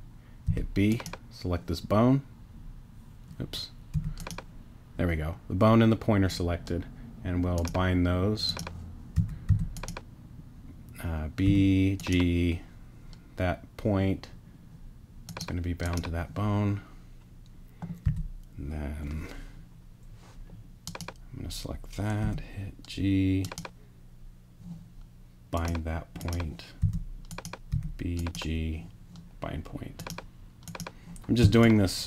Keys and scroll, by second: 0.5 b, 3.9 g, 9.1 g, 9.5 b, 11.4 g, 18.0 b, 22.2 g, 26.8 b, 27.7 g, 31.4 space.